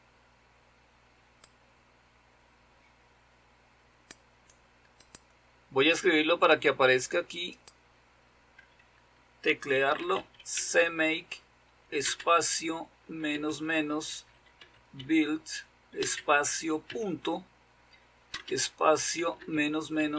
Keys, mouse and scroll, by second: 1.5-4.5 drag, 5.3 click, 7.5-8.6 drag, 9.5-16.8 typing, 18.3-20.1 typing.